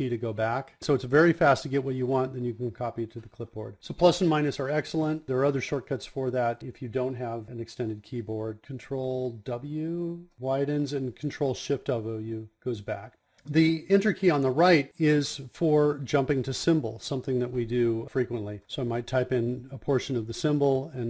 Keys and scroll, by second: 13.8 KP_Enter.